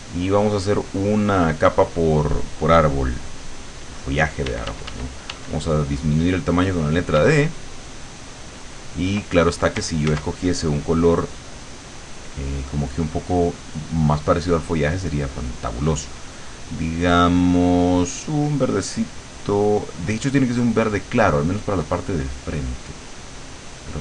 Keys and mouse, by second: 0.7 click, 4.5 d, 7.2 d, 7.5-9.4 drag, 10.1 ctrl+z, 12.2 click, 13.8 click, 14.9 click, 16.6-20.5 drag, 21.3 click.